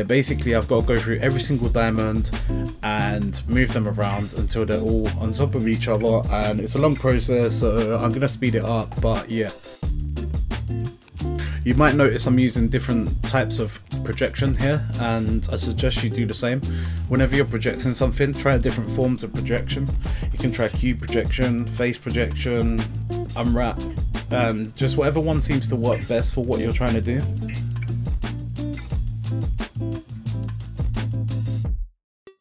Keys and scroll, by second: 0.9 a, 3.0 g, 5.4 g, 7.7 g, 10.1 g, 10.6 g, 11.6 l, 13.9 g, 14.2 Tab, 14.5 a, 15.3 g, 15.7 g, 16.5 Tab, 17.3 Tab, 17.4 a, 17.7 u, 18.6 u, 20.9-22.9 typing, 24.0 Tab, 25.6-27.4 typing, 25.8 Tab, 28.5-32.4 typing.